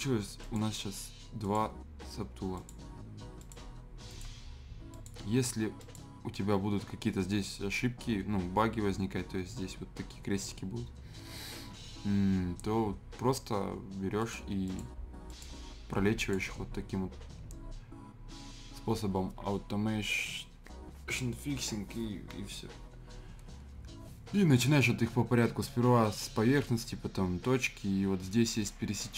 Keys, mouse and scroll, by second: 1.6 typing, 14.2 click, 28.5 click.